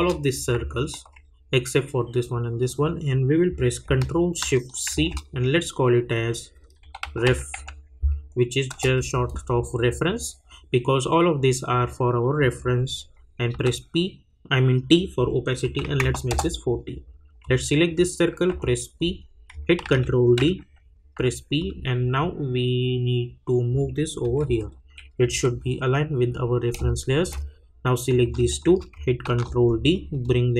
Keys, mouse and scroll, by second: 0.7-1.2 alt+scroll down 2, 4.9 ctrl+shift+c, 6.6-8.0 typing, 8.7 Return, 13.5 t, 15.6 click, 16.3 Return, 17.4 click, 18.5 p, 19.8 ctrl+d, 21.1 p, 21.6-24.2 drag, 24.2 Right, 25.0 Left, 26.8 space, 26.8 click, 29.2 ctrl+d, 30.2-30.5 drag.